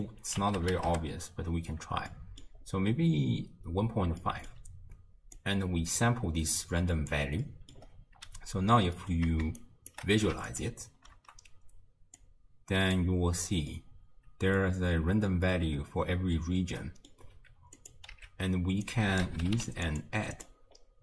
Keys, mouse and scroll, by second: 2.1 middle click, 2.7-3.4 scroll down 1, 3.4-4.2 scroll down 2, 4.2-5.4 middle drag, 5.4 click, 7.5 middle click, 7.8-9.0 scroll up 3, 9.0-9.6 middle drag, 9.6 shift+right click, 10.5 ctrl+shift+drag, 12.2 click, 13.7-16.7 middle drag, 16.8-17.8 middle drag, 17.8 click, 18.2 x, 18.8 drag, 19.6 d, 20.8 scroll up 3.